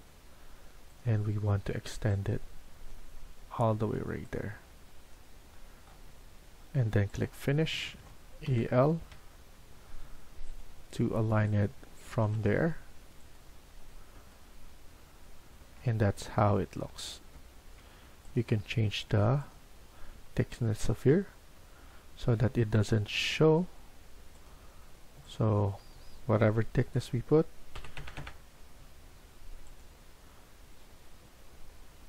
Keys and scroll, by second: 7.6 Escape, 7.9 Escape, 8.4-8.9 typing, 12.0 Escape, 12.3 Escape, 12.5 Escape, 27.4-28.4 typing.